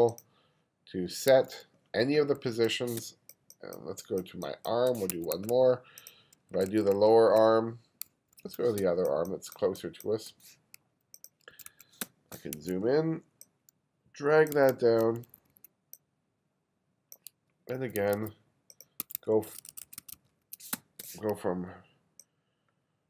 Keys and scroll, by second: 1.3 1, 2.4 2, 3.0 space, 5.2 2, 6.5 2, 8.1 1, 8.8 space, 11.5 2, 12.0 space, 12.6 2, 14.6 2, 17.8 1, 19.4 1, 20.8 space.